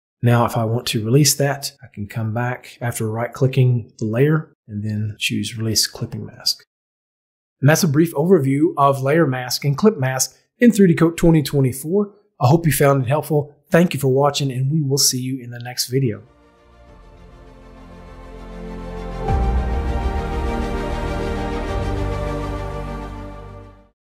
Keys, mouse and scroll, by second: 0.5 right click, 5.1 click, 8.3 KP_5.